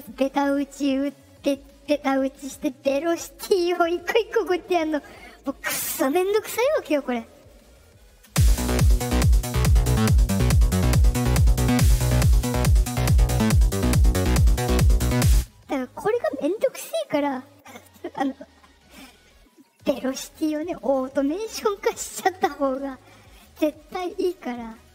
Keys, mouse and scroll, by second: 8.2 space, 15.3 space, 17.4 click, 20.6 middle click, 21.6 click.